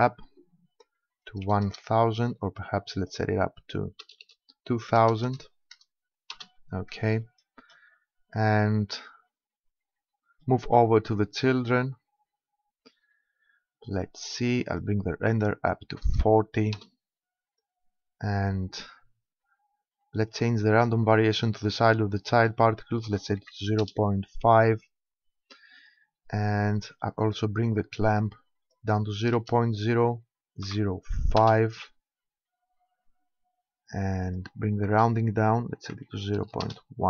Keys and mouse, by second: 14.7-16.5 drag, 21.3-23.1 drag, 27.3-29.0 drag, 34.3-36.0 drag.